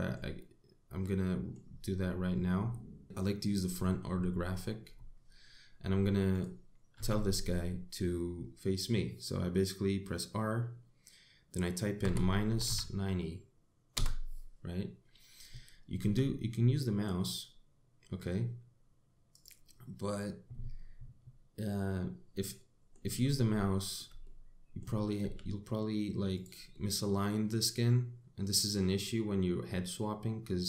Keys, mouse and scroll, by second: 0.2 middle click, 3.0 click, 7.0 click, 7.6 r, 16.6 r, 22.3 middle click, 23.8-24.1 scroll up 3, 24.3 shift+middle click, 24.9 middle click, 25.9 r, 27.4 middle click.